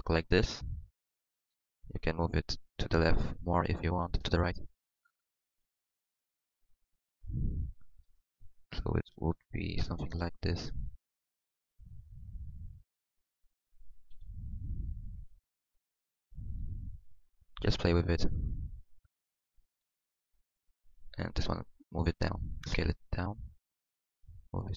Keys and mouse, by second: 2.3-3.6 middle drag, 3.6 click, 4.5-5.9 middle drag, 5.9-10.3 drag, 10.3-11.4 middle drag, 14.1-16.0 drag, 14.1 g, 16.3 click, 17.9 click, 21.4 g, 22.7 g, 22.7 s, 23.9-24.7 drag.